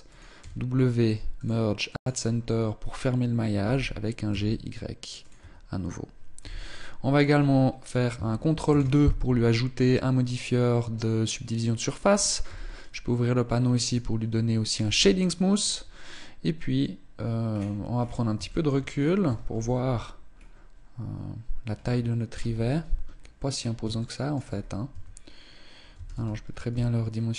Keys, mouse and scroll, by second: 0.2 w, 2.0 scroll up 1, 3.3 g, 5.1 Tab, 6.1 z, 6.4 scroll down 3, 8.4 ctrl+2, 9.4 middle click, 12.2 t, 13.6 click, 14.5 t, 17.2-18.0 scroll down 10, 18.2 shift+middle click, 18.6-19.3 scroll down 2, 19.3 KP_0, 20.0-20.7 scroll up 2, 22.1 KP_1, 22.8-23.5 scroll up 5, 23.5 shift+middle click, 24.2-24.6 scroll up 1, 24.6 Tab, 25.6 a, 25.8 a, 26.4 s.